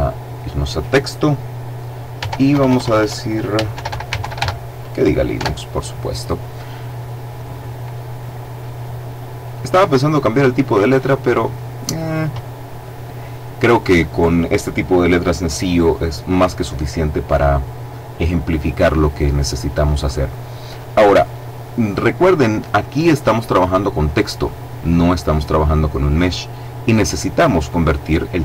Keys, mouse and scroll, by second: 2.1 Tab, 2.4 BackSpace, 3.6-4.2 typing, 5.2 Tab, 7.9-8.9 scroll up 2, 9.4-12.4 drag.